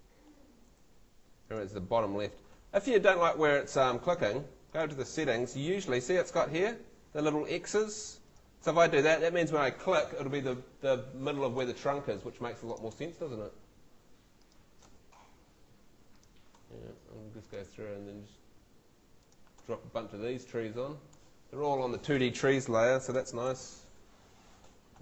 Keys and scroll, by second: 0.8 super+z, 3.0 super+z, 23.1 super+l.